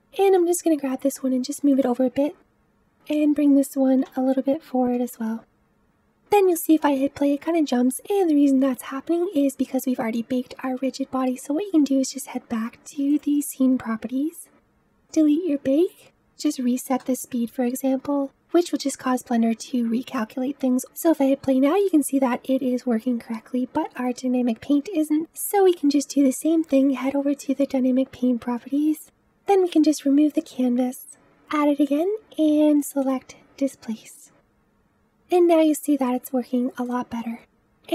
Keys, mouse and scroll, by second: 2.5 click, 2.5 middle drag, 2.8 g, 5.5-5.8 middle drag, 5.8 click, 6.2 space, 6.7 space, 8.7-10.8 drag, 13.0-18.2 drag, 20.7 space, 20.8 space, 21.4 space, 22.7 space, 24.4 click, 26.4 click, 29.7-31.7 drag, 31.7-32.9 scroll down 7, 32.9-34.4 drag, 34.4 space, 35.3 space, 36.0-36.9 middle drag, 36.9 space, 37.4 middle click.